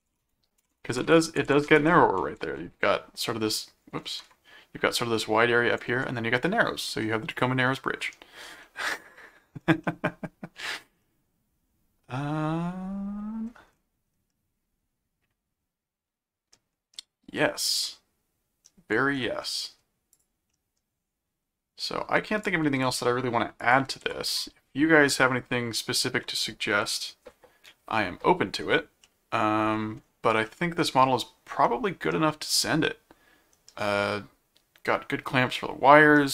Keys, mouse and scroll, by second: 0.0-2.2 typing, 2.5 ctrl+5, 4.0 ctrl+1, 7.3 click, 7.7 middle click, 8.6 middle click, 9.8 middle click, 11.0-13.5 middle drag, 14.3-16.5 middle drag, 16.9-19.1 middle drag, 20.1 click, 20.5 middle click, 22.4 click, 23.6 ctrl+click, 24.0 ctrl+s, 25.3 ctrl+6, 26.1 ctrl+7, 29.0 middle click, 30.4 middle click, 31.6-36.3 middle drag.